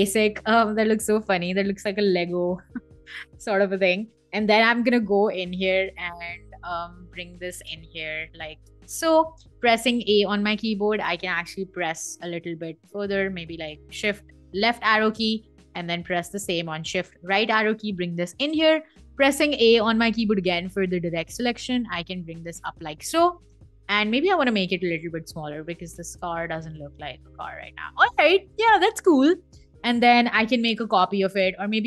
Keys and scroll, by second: 4.3 m, 9.3 a, 11.8 Left, 13.0 super+z, 13.5 shift+Left, 16.7 shift+Right, 23.0 v, 30.0 super+c, 30.6 super+f.